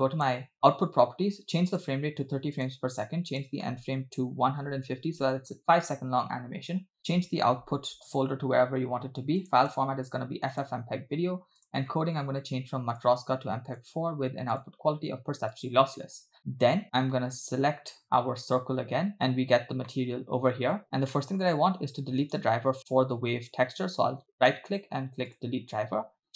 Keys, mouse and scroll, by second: 0.0 click, 1.7-2.8 drag, 3.3-5.4 drag, 6.3-6.9 scroll down 2, 7.0-9.6 drag, 8.1 /, 9.6-10.7 drag, 11.1 scroll down 2, 11.6 click, 11.9-12.9 scroll down 1, 13.0-14.1 drag, 14.6-15.8 drag, 18.5 click, 19.9 middle click, 20.8 scroll down 2, 21.1 middle click, 22.3 right click, 24.4-25.5 right drag.